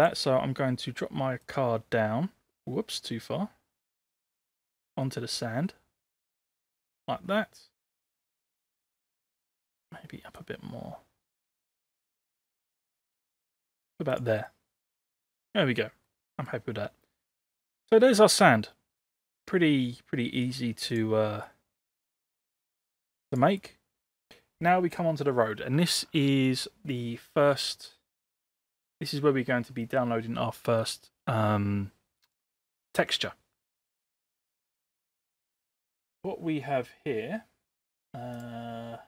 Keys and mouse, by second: 0.0 click, 1.4-6.8 drag, 7.1-7.9 middle drag, 9.1 middle click, 10.4-13.8 drag, 14.5-15.0 middle drag, 16.2-16.5 middle drag, 21.0-22.5 drag, 23.3 click.